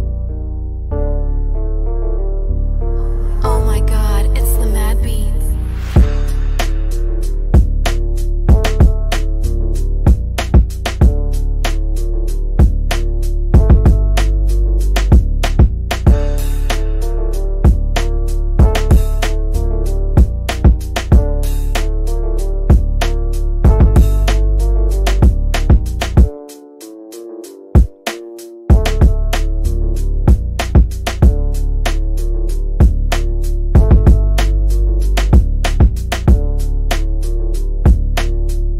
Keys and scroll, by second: 1.6 F3, 2.0 Escape, 5.2 w, 6.3 d, 9.6 shift+F2, 10.0 F3, 29.3 f, 32.9 g.